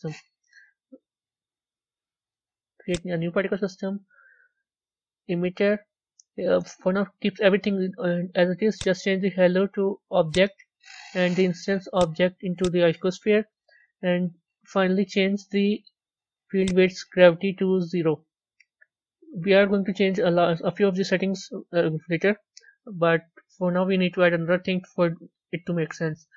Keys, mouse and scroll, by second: 2.8-12.0 drag, 16.6-24.1 drag, 24.1 a, 24.5-26.3 middle drag.